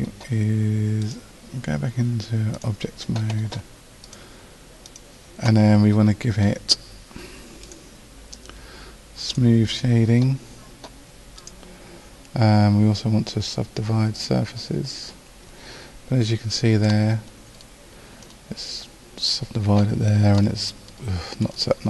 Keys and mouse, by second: 2.6 a, 7.6-13.2 drag, 17.0-19.2 drag, 20.7-21.8 middle drag.